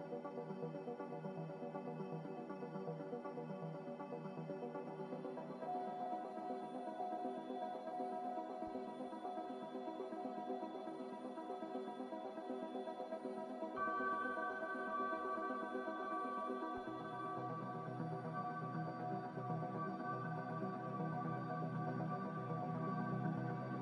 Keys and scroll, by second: 2.7 z, 6.4 7, 6.7 Return.